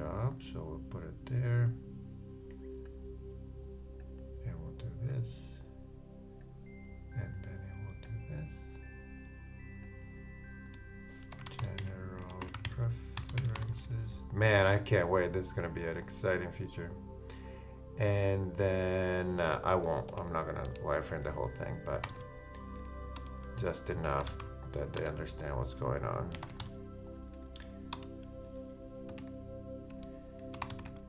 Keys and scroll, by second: 11.1-12.5 typing.